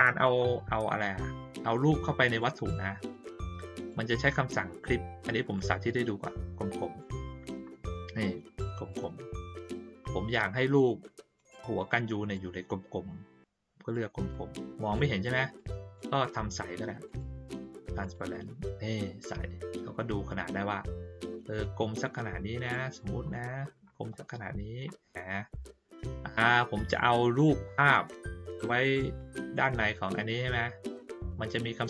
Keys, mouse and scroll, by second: 1.0-2.3 drag, 3.7 click, 5.5-7.0 drag, 8.9 click, 10.0-11.3 drag, 12.3-13.9 drag, 14.3-14.9 drag, 15.5 click, 17.0 right click, 18.0 click, 19.2-22.7 drag, 23.2 ctrl+middle click, 24.1 middle click, 26.8 click, 27.8 click, 28.5 click, 29.1-31.5 drag.